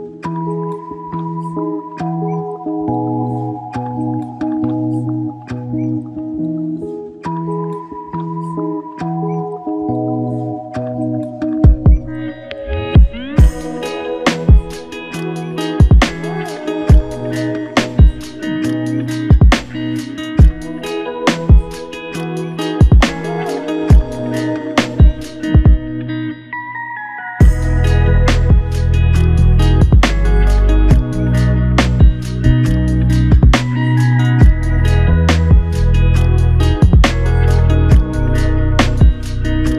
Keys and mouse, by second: 0.4 shift+click, 3.8 alt+click, 14.7-15.5 typing, 25.1 typing, 29.4 double click, 31.8 double click, 37.7 alt+click.